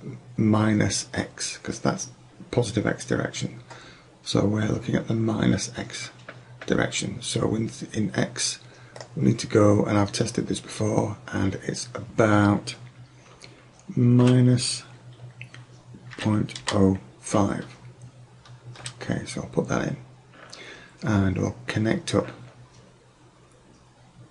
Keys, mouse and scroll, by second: 9.0-10.9 drag.